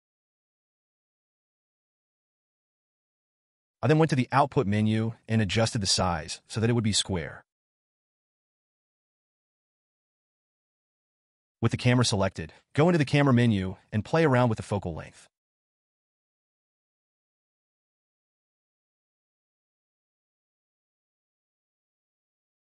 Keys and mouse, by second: 4.8 click, 5.6-8.8 drag, 12.9 click, 14.4-15.2 drag, 17.3-19.6 drag.